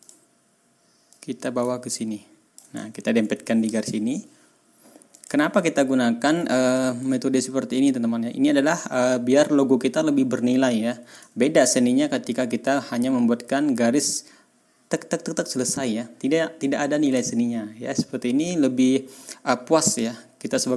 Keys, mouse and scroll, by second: 0.0 click, 1.1-2.7 drag, 2.8 ctrl+scroll up 2, 3.7 shift+click, 5.1 click, 5.8-6.4 ctrl+scroll down 4, 6.7 ctrl+click, 7.5-7.8 ctrl+scroll up 2, 11.3 ctrl+scroll down 2, 11.8 ctrl+scroll up 2, 17.2 ctrl+scroll down 2, 17.6 ctrl+scroll up 2.